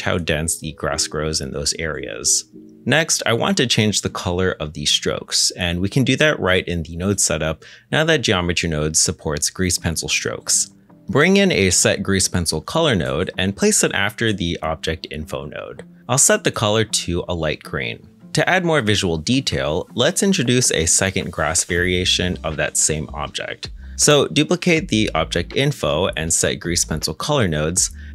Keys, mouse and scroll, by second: 0.4 middle click, 6.7 middle click, 7.0-7.6 scroll down 1, 7.6 middle click, 11.3-13.5 typing, 18.2 middle click, 23.7 g, 23.9 shift+d.